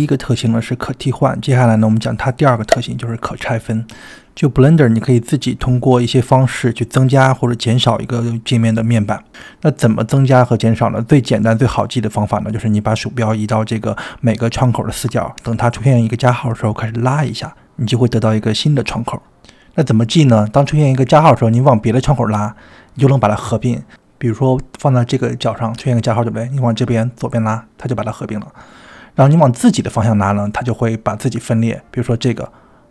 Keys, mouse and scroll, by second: 17.6-32.9 drag.